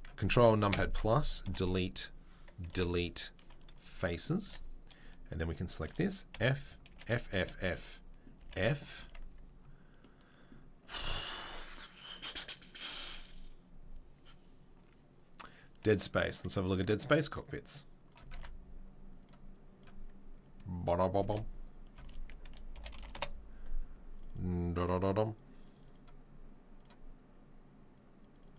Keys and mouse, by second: 0.7 ctrl+KP_Add, 1.4 Delete, 2.7 Delete, 4.4 2, 4.9 click, 5.1-6.6 shift+middle drag, 6.3 f, 6.6 click, 6.7-19.6 middle drag, 6.9 f, 8.4 f, 9.0 Tab, 19.8-25.8 middle drag, 28.4 middle click.